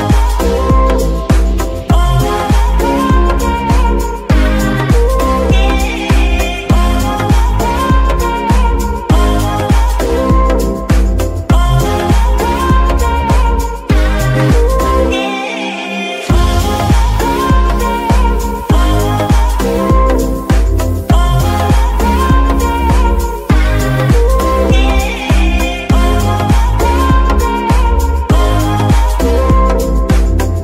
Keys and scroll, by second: 7.7 Tab, 10.4 KP_3, 17.3 g, 17.5 y.